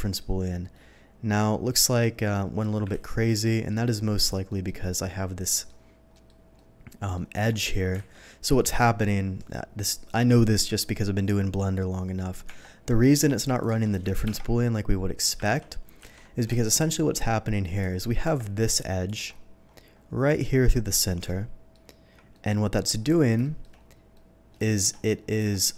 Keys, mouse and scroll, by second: 0.7-2.6 middle drag, 2.9 ctrl+z, 3.4 middle drag, 4.1 click, 4.4 middle drag, 4.6 ctrl+z, 5.5 middle click, 6.1 middle click, 6.5-7.1 middle drag, 7.3 Tab, 8.1 alt+a, 12.4 Tab, 12.8 middle click, 13.6 shift+click, 14.2 ctrl+KP_Subtract, 15.0 ctrl+middle click, 15.4 ctrl+z, 16.0 ctrl+z, 16.5 alt+a, 16.7 alt+middle click, 17.7 alt+click, 18.2 Tab, 18.8 alt+Tab, 19.0 click, 19.9 middle click, 21.2 ctrl+middle click, 22.3 ctrl+middle click, 23.4 shift+middle click, 24.1 shift+middle click, 24.6 shift+middle click, 24.9-25.3 shift+scroll up 1, 25.3 Tab.